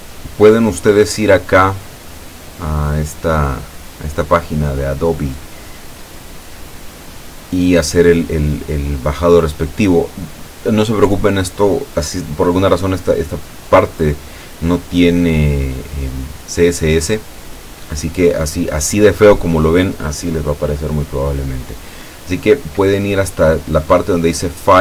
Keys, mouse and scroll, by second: 4.1 middle click, 7.0 click, 9.3-9.6 scroll down 2, 9.8 scroll up 2, 15.8-22.0 drag, 24.4-24.8 drag.